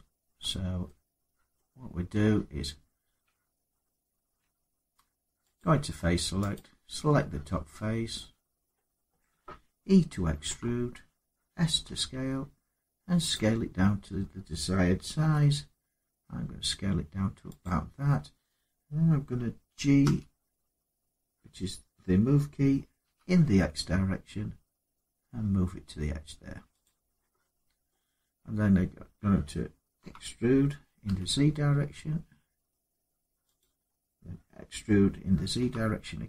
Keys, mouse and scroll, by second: 1.3 middle click, 3.1 Tab, 4.2 Tab, 5.3 click, 6.3 click, 7.0-7.4 scroll down 3, 8.4 middle click, 8.4 scroll up 3, 10.2 e, 11.6 s, 13.1 click, 13.6-15.0 scroll up 2, 15.0 s, 17.4 click, 19.8 g, 22.8 x, 26.6 click, 27.2 scroll up 1, 27.7 middle click, 29.8 e, 30.8 z, 33.3 click, 35.3 e.